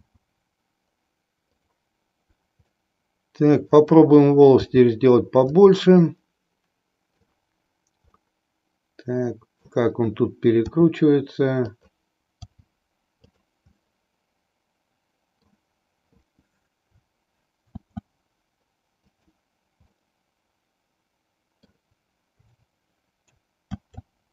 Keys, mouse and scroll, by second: 0.0 s, 2.7-3.9 middle drag, 4.8 g, 6.0-7.2 middle drag, 8.1-9.6 middle drag, 10.6 r, 11.6 click, 12.5 g, 13.4 click, 13.7-15.6 middle drag, 17.7 shift+d, 19.1 click, 20.0-21.9 middle drag, 23.6 shift+d.